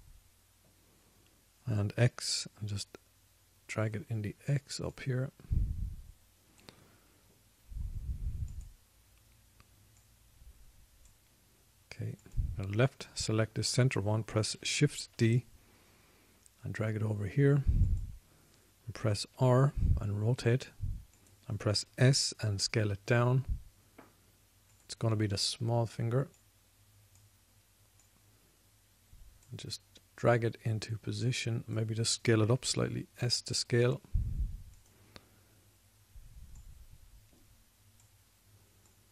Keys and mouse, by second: 0.4 s, 6.3 click, 8.3-8.6 middle drag, 8.6-9.2 drag, 9.4-13.1 middle drag, 13.2 click, 13.6-16.5 drag, 16.5 shift+d, 20.6 r, 23.2 s, 26.7-27.7 drag, 33.9 s.